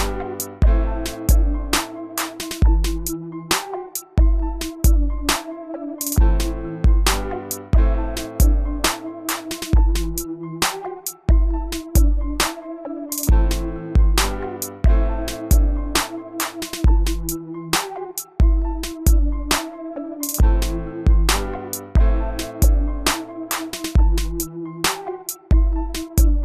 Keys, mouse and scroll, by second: 5.1-7.9 middle drag, 8.7 click, 25.3-26.4 typing.